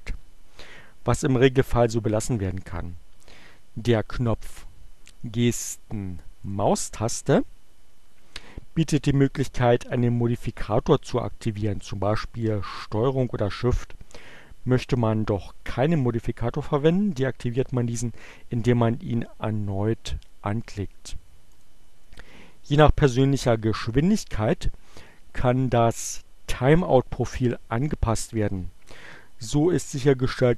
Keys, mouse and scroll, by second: 6.3 click, 21.5 click, 25.3 click.